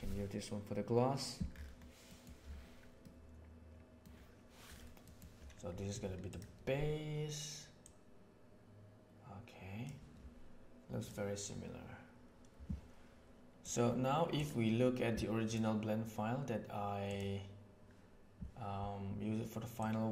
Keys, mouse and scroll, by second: 5.1 middle click, 6.2 click, 7.8-9.8 drag, 13.6 click.